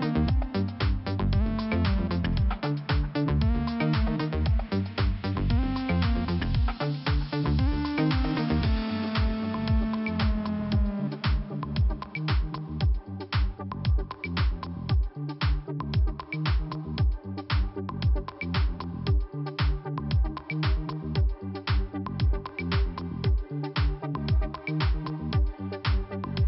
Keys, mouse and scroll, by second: 1.0 click, 7.0 click, 8.9 click, 9.0 click, 10.3 click, 12.1 click, 15.2 click, 16.5 click, 17.9 click, 18.0 click, 19.6 click, 19.7 click, 22.2 click, 22.3 click, 23.7 click, 24.6 0, 24.7 Return, 24.9 Return.